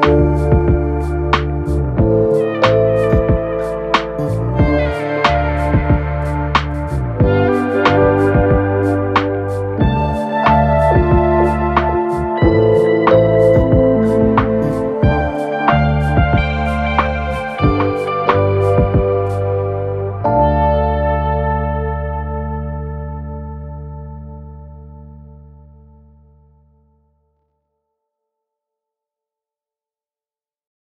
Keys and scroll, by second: 7.2 ctrl+z, 11.2 p, 21.4 p.